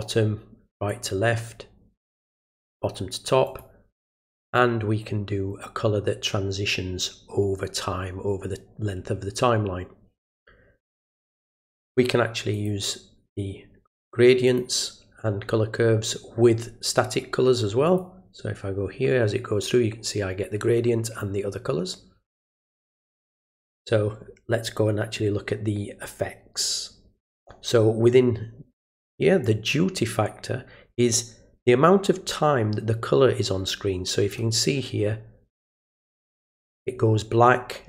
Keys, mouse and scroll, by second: 0.9 click, 3.4 click, 12.5 click, 14.4 click, 17.8 click, 22.5 click, 23.0 click, 29.4-34.3 drag.